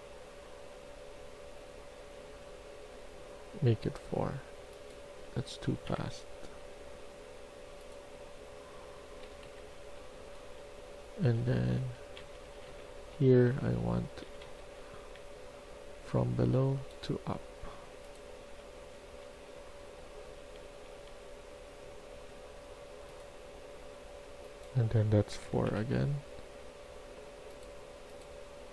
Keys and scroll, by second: 5.6 typing, 5.8 Return, 9.1-14.9 typing, 17.9-19.0 typing, 20.3 q, 20.8 q, 25.4 4, 25.6 Return.